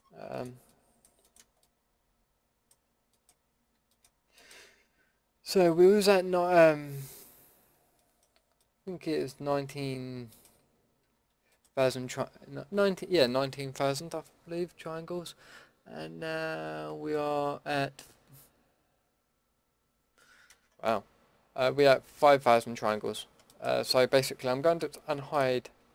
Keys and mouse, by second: 0.0-1.0 middle drag, 5.4 Tab, 10.6 Tab, 11.0 a, 22.9 Tab, 24.9 alt+h.